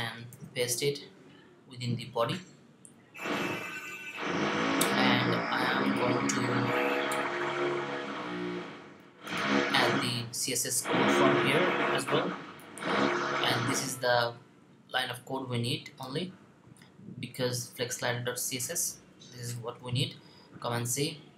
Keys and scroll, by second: 0.1 super+v, 19.4 c.